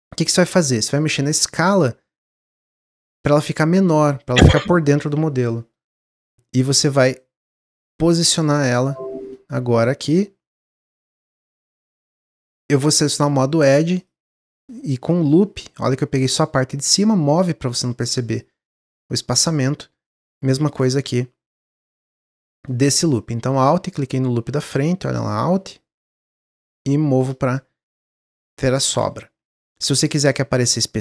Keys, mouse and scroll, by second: 1.2 s, 3.4-4.5 middle drag, 4.5 s, 5.4-6.9 middle drag, 6.9 click, 8.1 click, 8.8-9.8 middle drag, 9.8-11.2 drag, 11.2-12.5 middle drag, 12.5 click, 13.9 alt+click, 14.5 middle click, 15.3-15.6 scroll up 1, 15.6 middle click, 16.0-16.8 scroll up 1, 16.8-19.5 drag, 19.5-20.5 middle drag, 20.5 alt+click, 21.5 click, 22.0-23.4 middle drag, 23.4 alt+click, 24.6 click, 25.1 alt+click, 25.5 middle click, 26.3-27.5 drag, 27.5 middle click, 28.1 scroll down 2, 28.4 middle click, 29.2 Tab, 29.5 middle drag, 29.8-30.1 scroll down 1, 30.1-31.0 middle drag.